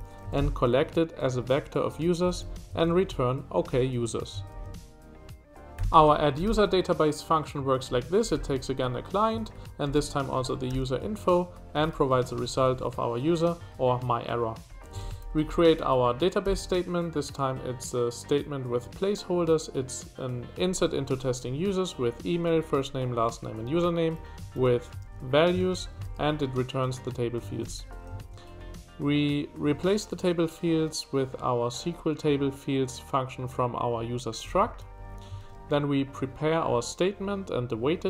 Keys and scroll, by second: 0.1 j, 2.2 Escape, 2.5 j, 4.5 shift+v, 5.5-16.4 typing, 7.6 Escape, 13.6 Escape, 24.4 Escape, 24.6 k, 25.0 shift+v, 27.4 Escape, 27.8 j, 28.2 shift+v, 34.6 Escape, 34.9 j, 35.4 shift+v, 38.0 Escape.